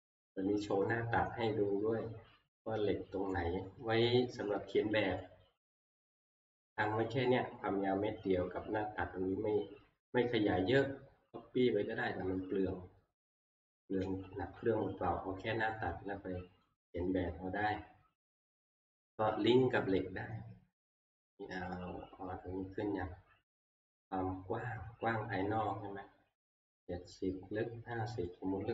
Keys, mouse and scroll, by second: 0.4-1.3 scroll, 2.0-3.2 scroll, 3.3-3.8 scroll down 5, 4.5-5.2 scroll down 4, 5.4 scroll, 5.9 shift+middle click, 7.9 shift+middle click, 10.7 middle click, 13.0 middle click, 13.5 middle click, 13.7 middle click, 14.1 x, 14.4 scroll down 3, 14.4 middle click, 14.4 scroll, 14.9 middle click, 15.1 middle click, 15.2 middle click, 17.5 scroll, 28.3 click.